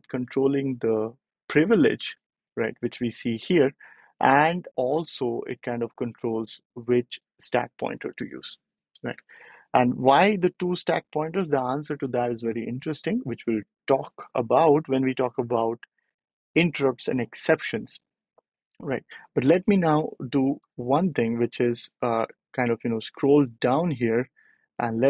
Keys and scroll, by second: 20.5 BackSpace, 22.0 ctrl+alt+super+p.